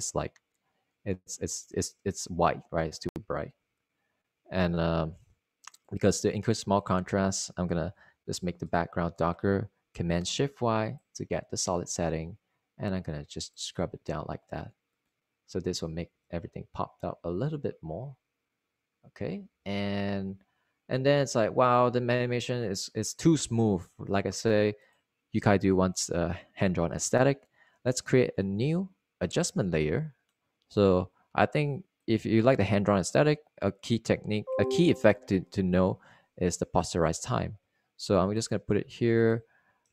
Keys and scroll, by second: 10.0 alt+super+y, 17.5 Return, 17.8 Return, 21.2 super+s.